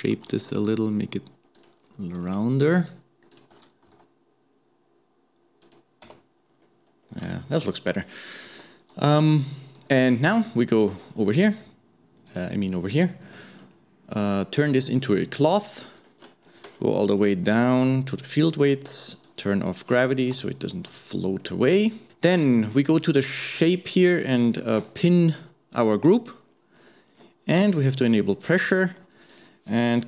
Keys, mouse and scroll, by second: 0.0 alt+shift+click, 0.5 s, 2.8 alt+shift+click, 3.3 alt+shift+click, 3.9 s, 6.5-6.9 scroll down 1, 6.9-7.4 scroll up 2, 7.4-10.4 shift+middle drag, 10.8 click, 12.3 click, 13.3-14.6 scroll up 1, 14.6-15.9 drag, 15.9-16.4 scroll down 5, 16.4 scroll up 1, 16.5-17.3 scroll down 9, 17.3 scroll up 1, 17.5-18.1 scroll down 1, 18.1 click, 18.6-19.3 scroll down 1, 19.3 click, 20.1-20.4 scroll down 1, 20.4 shift+middle click, 21.1 scroll up 2, 22.1 shift+middle click, 23.0 click, 24.2-26.5 drag, 26.5 scroll up 1, 27.1-27.9 scroll down 1, 27.9 click, 29.3-30.0 drag.